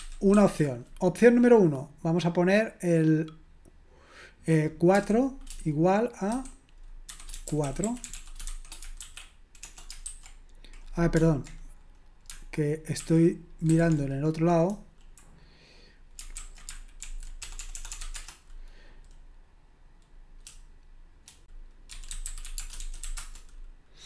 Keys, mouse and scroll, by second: 0.0-0.4 typing, 7.4-10.0 typing, 13.0 alt+a, 13.7 alt+b, 14.7 Delete, 16.4 ctrl+a, 17.1 alt+f, 17.4-18.2 typing, 18.2 Return, 21.9-23.5 typing.